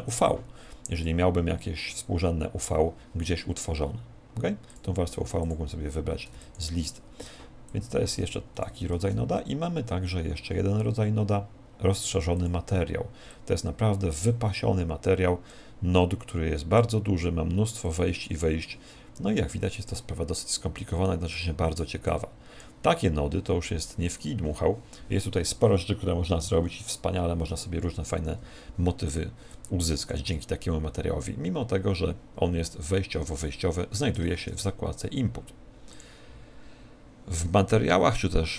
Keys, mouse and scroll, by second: 15.6 click, 17.8 click.